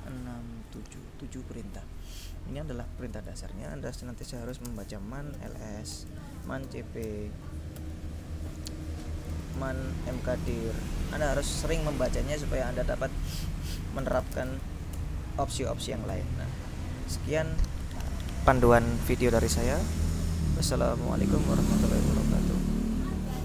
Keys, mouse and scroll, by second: 0.9 click, 1.1 click, 3.4 click, 4.2-7.9 typing, 9.4-11.3 typing, 13.8-16.2 typing, 21.3 click.